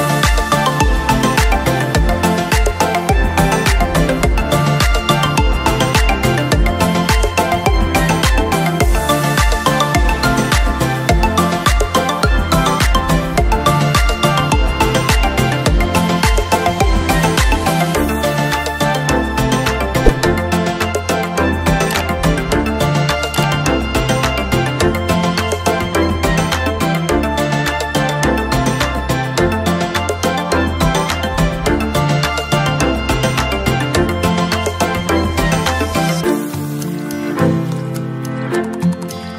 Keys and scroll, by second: 18.2 ctrl+(, 18.8 ctrl+~, 18.9 ctrl+z, 30.9 ctrl+f, 31.0 ctrl+z.